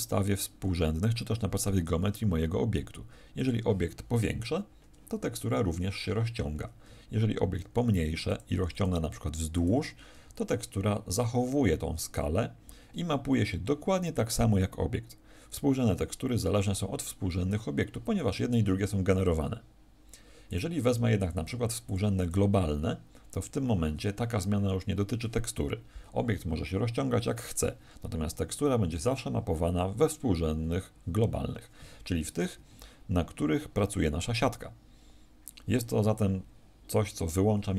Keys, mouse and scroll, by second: 3.4 click, 6.6 Escape, 7.5 s, 8.3 click, 8.6 s, 9.6 click, 32.5 Escape.